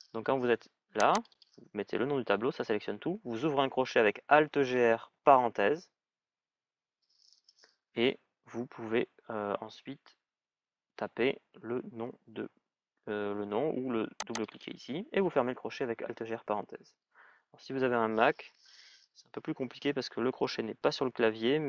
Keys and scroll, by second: 4.7 alt+(, 16.2 alt+).